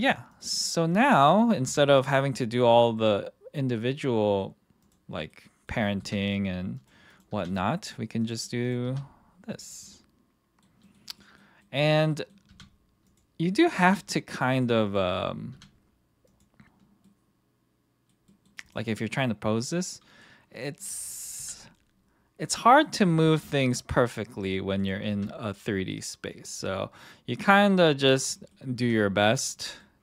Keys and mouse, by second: 0.3 click, 1.6 r, 2.9-4.4 middle drag, 4.8 click, 5.1 middle click, 5.6 middle click, 6.0 r, 6.7 click, 7.1 click, 7.3 r, 8.8 r, 9.6 click, 9.8-10.6 middle drag, 10.8 middle click, 11.1 middle drag, 11.6 middle click, 12.1 middle drag, 12.4 r, 13.0 click, 13.8 r, 14.5 click, 14.8 click, 15.5 r, 16.3 click, 17.0-18.1 middle drag, 18.2 middle drag, 19.0 middle click, 19.5-20.8 middle drag, 21.3 r, 22.4 click, 22.8 click, 23.2 r, 24.3 click, 25.0 r, 26.3 click, 26.6-27.3 middle drag, 28.4 middle click, 28.8 r, 29.8 middle click.